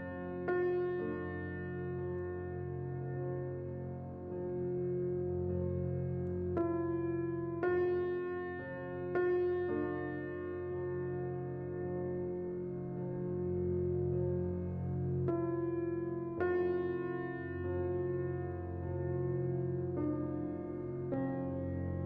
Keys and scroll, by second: 4.0-5.0 typing, 6.8-7.6 typing, 10.1 a, 10.1 x, 10.7 z, 14.1 a, 21.9 x.